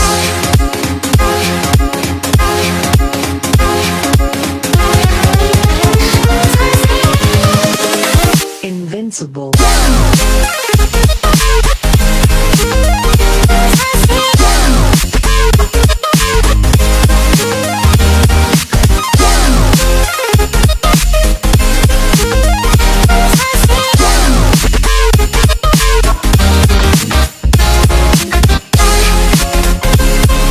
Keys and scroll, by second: 16.3 1, 30.0 1.